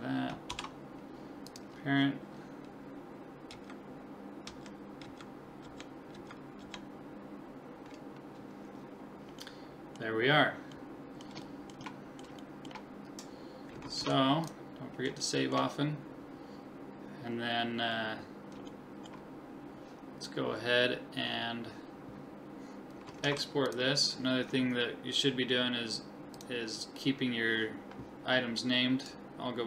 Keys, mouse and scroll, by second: 0.5 ctrl+p, 3.5 Right, 4.5 Left, 5.1 Right, 5.6 Left, 6.2 Right, 6.6 Left, 9.0-14.2 middle drag, 14.0 ctrl+s, 15.3-17.2 middle drag, 17.4-18.2 scroll up 1, 18.2-18.8 scroll up 1, 18.8-20.8 middle drag, 22.5-23.3 scroll up 1, 23.3 ctrl+s, 23.3-26.4 middle drag, 26.4-28.1 drag.